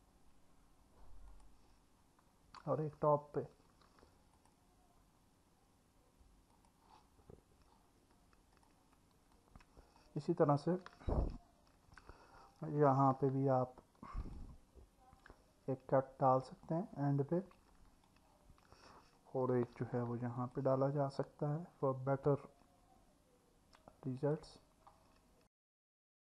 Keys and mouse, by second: 3.7 ctrl+r, 6.5 click, 10.0 click, 12.9 ctrl+r, 17.6 click, 19.7 ctrl+r, 24.2 click, 26.1 click.